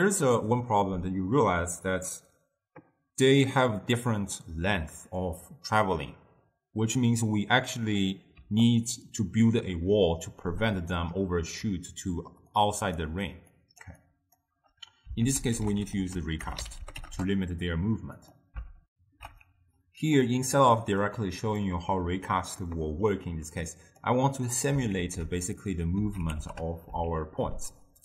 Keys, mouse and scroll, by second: 17.2 ctrl+a.